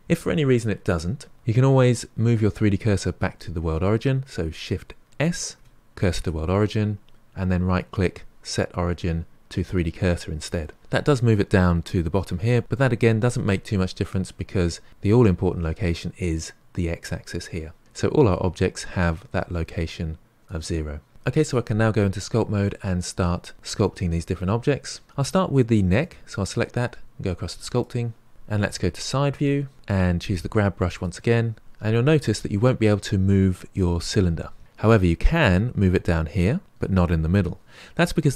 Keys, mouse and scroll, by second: 5.2 shift+s, 5.7 shift+s, 7.7-10.6 right drag, 18.2 click, 19.0 click, 19.7 click, 20.4 click, 25.9 click, 27.7 click, 28.7 KP_3, 29.7 shift+middle click, 30.9-37.9 drag.